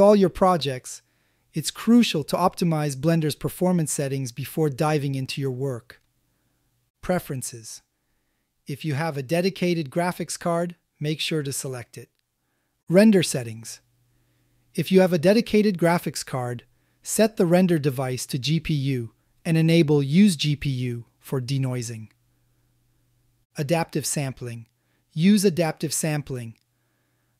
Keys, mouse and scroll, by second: 15.1-18.9 drag, 20.3 click, 20.8-21.3 drag, 26.0-27.3 drag.